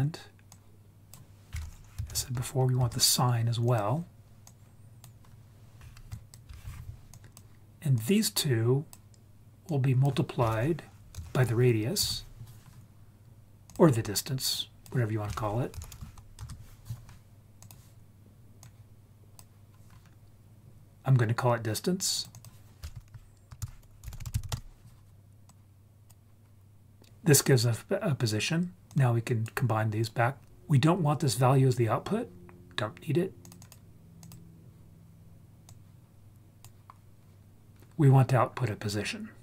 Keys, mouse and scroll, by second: 0.5-2.8 drag, 3.7 click, 4.5 click, 6.1 ctrl+click, 6.1 ctrl+right click, 7.1 click, 8.0-9.0 drag, 9.7-12.0 drag, 13.7 click, 14.7-16.4 drag, 17.6 click, 18.6-19.4 drag, 22.4-24.5 drag, 25.5-26.1 drag, 28.9-29.5 drag, 30.1 click, 33.5 click, 34.2 click, 35.7-36.7 drag.